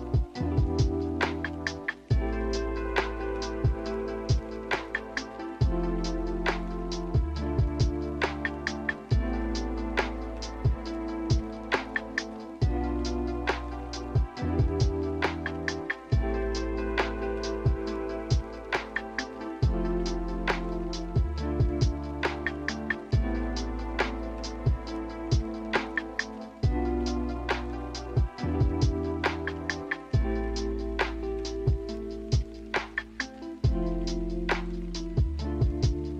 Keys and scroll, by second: 23.3 Delete, 31.0 b, 33.5 Delete, 34.2 m, 34.9 a.